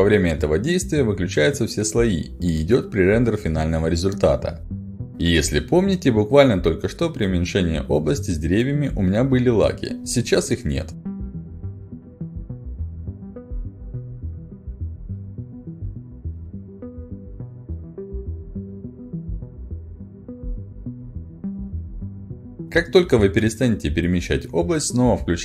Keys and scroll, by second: 5.1 a, 23.8 a, 24.2 w, 25.2 s.